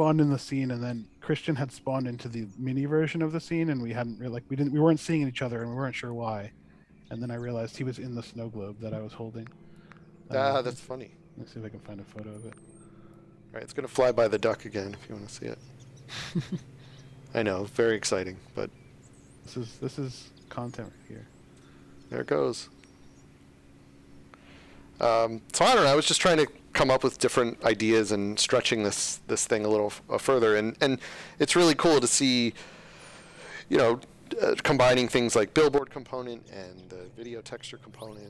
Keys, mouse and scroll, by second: 5.2 s, 8.7 space, 9.7 click, 13.1 click.